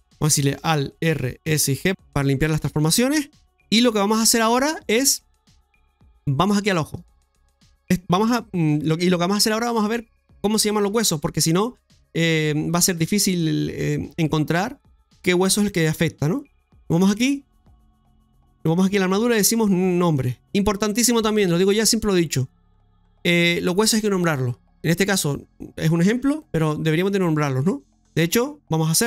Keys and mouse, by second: 1.0 ctrl+z, 1.4 alt+s, 1.9 click, 3.1 middle click, 4.0-5.3 middle drag, 6.9-7.9 right drag, 12.9 click, 18.8 click, 20.1 click.